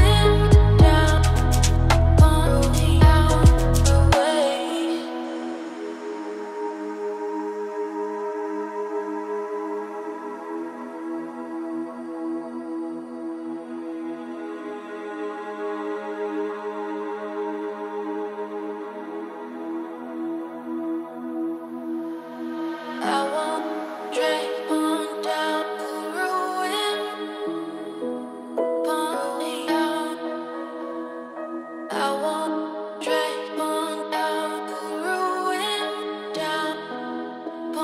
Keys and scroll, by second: 29.3 ctrl+space, 32.4 ctrl+z.